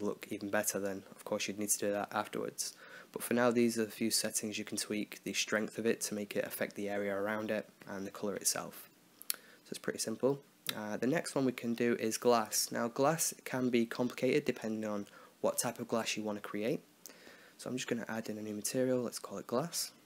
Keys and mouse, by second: 0.4 click, 3.4 middle click, 4.0 click, 5.0 click, 5.7 click, 7.3-9.4 middle drag, 9.4-11.2 drag, 11.3-17.2 right drag, 17.2-19.2 drag, 19.2 s.